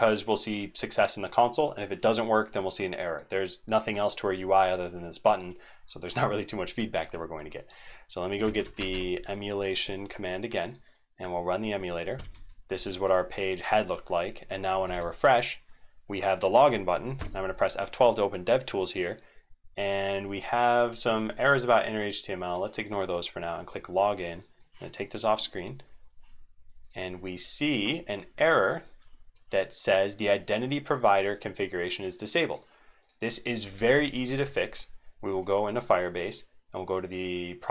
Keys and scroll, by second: 8.4 ctrl+c, 8.8 alt+Caps_Lock, 12.2 super+1, 14.8 ctrl+r, 20.3 super+Right, 33.7 ctrl+t, 34.2 alt+Home.